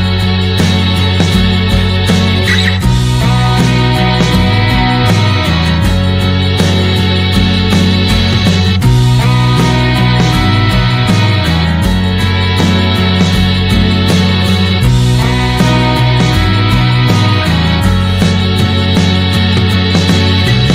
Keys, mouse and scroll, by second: 0.9 click, 5.5-6.7 middle drag, 6.7 click, 7.3 middle click, 8.0-9.1 drag, 13.0 s, 17.1 click, 19.5 alt+middle click, 19.8 alt+middle click, 20.3 shift+middle click.